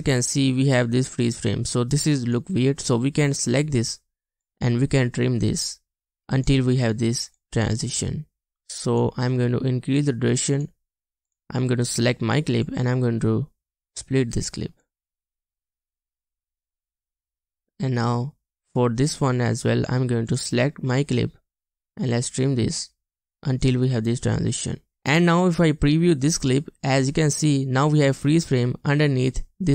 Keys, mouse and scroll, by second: 26.7 space, 29.0 space.